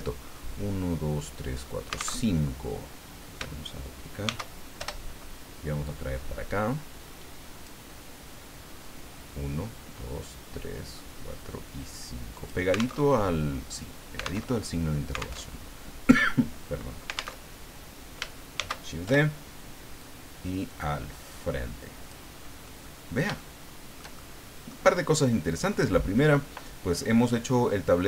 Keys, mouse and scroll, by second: 2.2 alt+Tab, 4.2 shift+d, 4.8 shift+Return, 5.8-7.8 drag, 8.8-12.7 drag, 12.9 alt+Tab, 14.4 alt+Tab, 15.3 alt+Tab, 17.4 alt+Tab, 18.5 shift+d, 19.1 shift+Return, 20.0-22.3 drag, 22.6-24.8 middle drag.